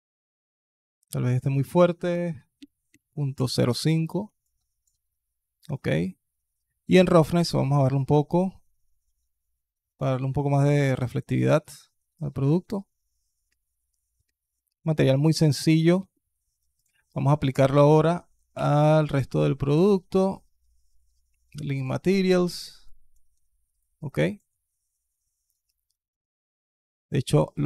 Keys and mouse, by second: 0.9-3.2 drag, 4.4 alt+click, 5.8 middle click, 6.7-9.8 drag, 10.9 alt+click, 12.1 alt+click, 13.3 click, 15.5 click, 18.4 ctrl+l, 22.8 alt+click, 23.6-24.2 alt+drag, 27.4 alt+click.